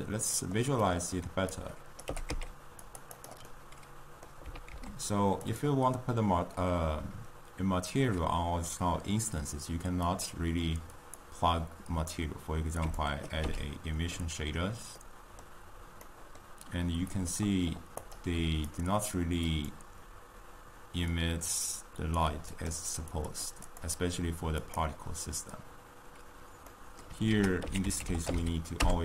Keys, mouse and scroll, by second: 11.4-12.8 drag, 13.4-15.8 drag, 15.8-17.4 middle drag, 17.4 click, 18.0 click, 18.7 click, 19.5-21.2 drag, 22.5 drag, 23.1-23.6 drag, 23.6 click, 24.7 click.